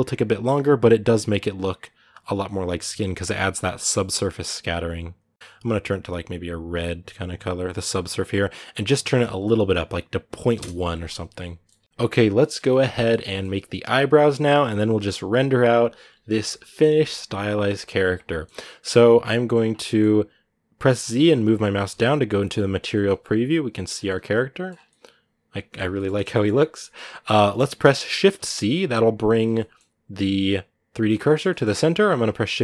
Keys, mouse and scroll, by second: 0.0 scroll up 6, 8.8-11.2 drag, 11.2 middle click, 11.6 ctrl+s, 11.8-13.2 shift+middle drag, 13.2 scroll up 1, 13.8 right click, 14.5 KP_Decimal, 16.1-19.4 middle drag, 19.4 scroll down 1, 19.8-21.3 middle drag, 21.3 z, 22.3 middle click, 22.6 scroll up 1, 22.7 middle click, 23.7 scroll down 1, 23.8 middle click, 24.4 scroll up 1, 24.7-28.1 middle drag, 28.1 shift+c, 29.3-32.6 middle drag.